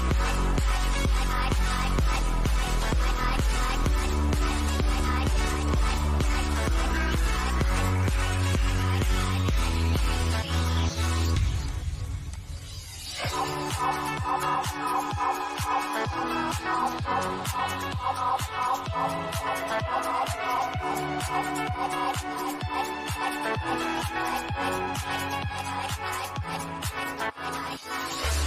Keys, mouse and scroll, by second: 4.9 click, 9.4 click, 9.5 shift+middle click, 10.9 click, 13.0 ctrl+click, 14.1-16.1 shift+middle drag, 16.1 ctrl+click, 16.8-18.7 shift+middle drag, 18.7-20.5 shift+middle drag, 20.5 click, 26.0-28.4 shift+middle drag.